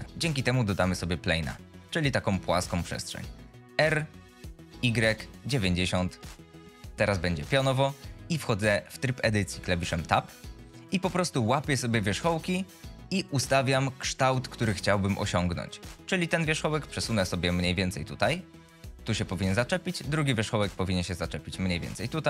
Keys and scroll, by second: 4.0 r, 5.7 Insert, 5.9 Return, 9.5 Tab, 16.0 g, 20.4 g.